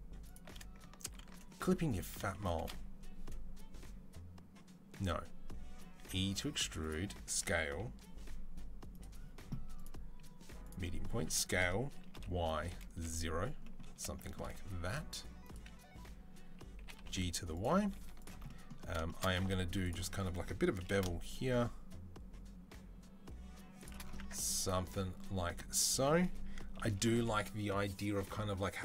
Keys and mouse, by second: 1.0 ctrl+z, 5.8 e, 7.1 s, 9.6-17.4 drag, 11.0 s, 14.8 s, 16.6 g, 17.4-19.7 middle drag, 19.2 2, 19.7 alt+click, 19.7-22.2 alt+middle drag, 20.6 ctrl+b, 22.2-23.6 shift+drag, 24.0 Tab, 26.6 KP_3.